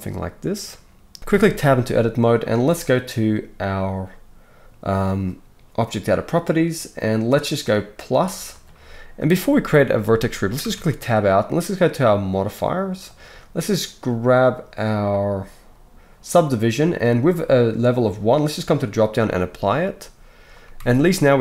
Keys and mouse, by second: 1.3 Tab, 3.1-8.0 middle drag, 8.0-13.2 drag, 10.6 Tab, 13.2-15.3 middle drag, 15.3-21.4 drag, 20.8 Tab.